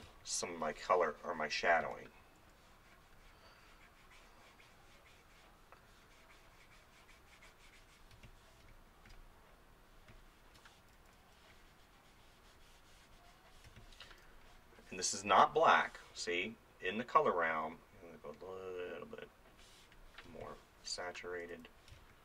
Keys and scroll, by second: 0.1 space, 1.8 ctrl+z, 2.2 ], 8.1 space, 13.7 space, 20.3 space, 21.3 [, 21.9 space.